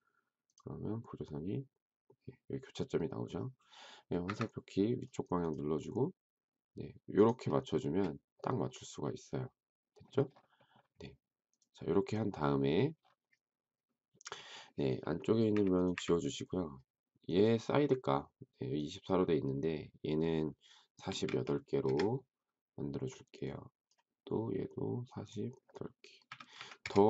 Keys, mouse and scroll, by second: 4.2 Up, 7.8 space, 15.5 Delete, 15.9 Delete, 20.8-21.7 typing, 21.7 Return, 26.0-26.8 typing.